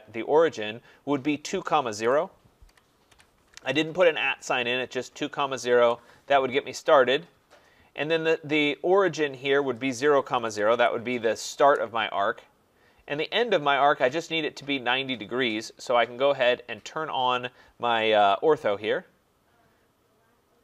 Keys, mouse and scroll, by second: 2.0-3.1 typing, 5.8 Return, 7.8 middle click, 7.9 middle click, 8.0 middle click, 10.1-11.6 typing, 18.3 click.